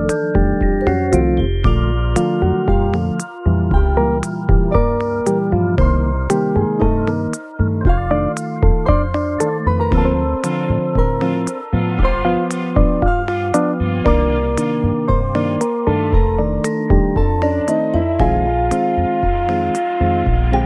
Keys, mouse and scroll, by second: 4.5 scroll down 3, 5.1 middle click, 6.7 shift+middle click, 8.0-8.3 scroll up 2, 11.1-11.6 scroll down 2, 11.6 middle click, 12.1-12.9 scroll up 1, 15.5 scroll up 1, 15.7 scroll down 2, 16.3 scroll up 2, 19.1 scroll down 3, 19.5 middle click, 19.9-20.3 scroll up 2.